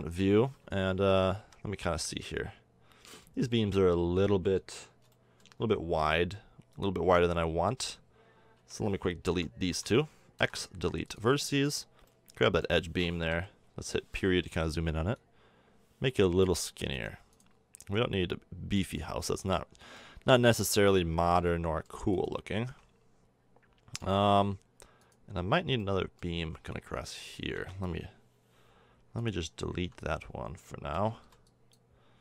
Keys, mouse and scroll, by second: 0.9 a, 1.3 z, 1.7 Tab, 2.2-2.6 middle drag, 3.7 middle click, 5.9 Tab, 8.5 a, 9.2 l, 9.6 l, 10.3 x, 12.0 middle drag, 13.2 KP_Decimal, 19.0 middle click, 20.1 Tab, 21.4-21.8 middle drag, 22.6 Tab, 25.5 click, 29.8 l, 31.2 x.